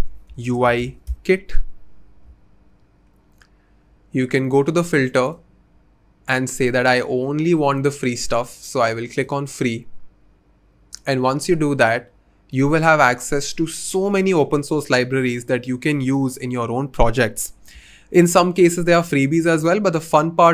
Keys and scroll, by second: 0.0-1.4 typing.